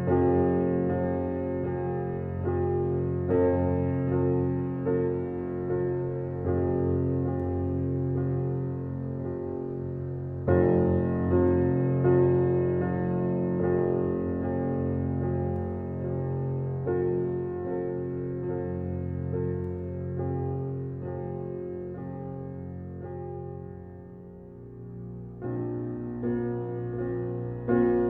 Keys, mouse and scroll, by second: 1.4 Left, 2.7-4.5 scroll up 1, 8.1-8.7 scroll up 1, 8.7-9.1 scroll down 1, 10.4 scroll up 1, 10.9 click, 24.0 scroll up 1, 24.5-25.9 scroll down 1, 26.3-27.5 typing.